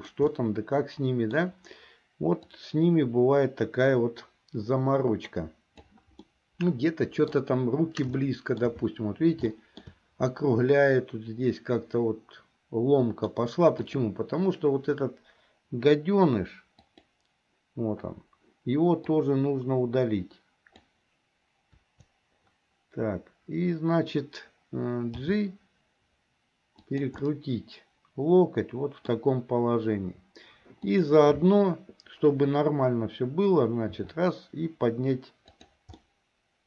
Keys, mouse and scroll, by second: 0.5-1.6 middle drag, 2.6-6.1 drag, 6.3-7.4 middle drag, 8.3 shift+middle click, 9.7 shift+middle click, 10.8-13.5 middle drag, 13.9 click, 17.0 click, 19.1-20.9 drag, 21.9 Delete, 25.3 g, 27.3-29.3 middle drag, 30.8 click, 34.1 r, 36.2-36.6 middle drag.